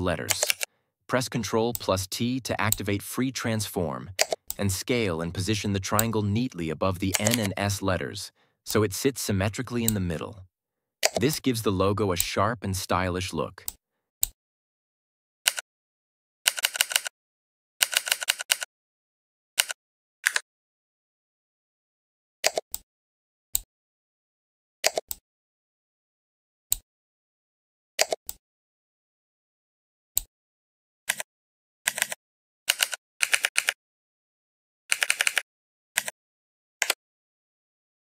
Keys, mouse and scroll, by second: 0.4 ctrl+t, 1.6-2.9 drag, 4.4-5.9 shift+drag, 7.2 ctrl+z, 8.6-9.8 drag, 11.2-12.1 shift+drag, 15.4 Down, 20.1 Up, 22.6-23.6 shift+drag, 31.0 Left, 32.6 Down, 33.1 Right, 35.9 Left, 36.7 Return.